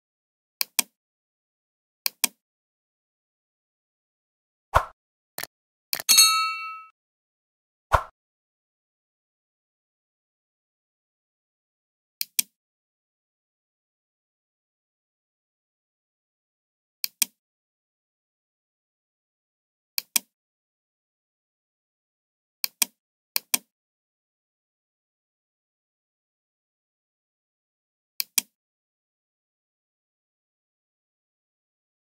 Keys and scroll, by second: 25.6-26.6 typing.